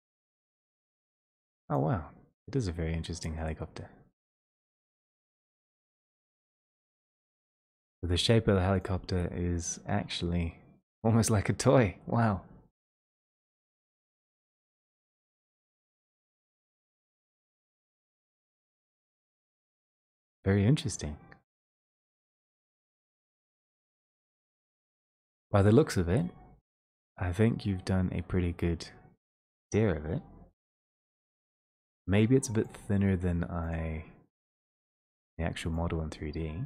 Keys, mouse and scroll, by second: 14.9 scroll, 14.9 scroll down 4, 15.8 click, 22.2 click, 25.9 click, 26.0 click, 26.0-26.6 scroll down 6, 32.7 click.